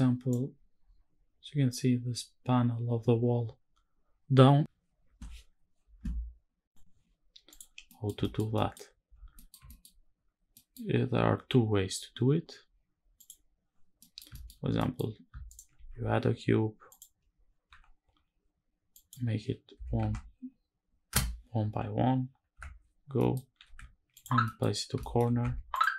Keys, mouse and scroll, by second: 7.2 click, 7.4 scroll down 1, 7.6 middle click, 7.9 shift+middle click, 8.2 middle click, 9.0 middle click, 9.4 shift+middle click, 9.8 scroll up 1, 10.2 middle click, 12.9 click, 13.7 middle click, 14.0 shift+middle drag, 14.3 scroll up 1, 14.4 middle click, 15.2 shift+right click, 15.4 shift+a, 17.4 n, 18.6-20.8 drag, 22.3 KP_Decimal, 22.7 scroll down 2, 22.9 middle click, 23.2 g, 23.8 ctrl+click, 24.1 middle click, 24.7 shift+middle click, 25.1 Tab, 25.4 click, 25.8 g.